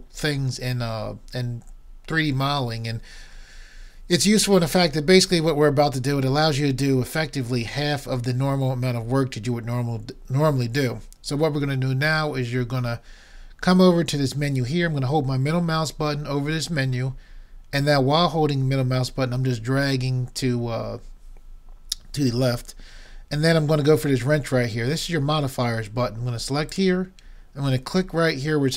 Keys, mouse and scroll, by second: 17.0-26.7 middle drag, 26.7-28.4 drag.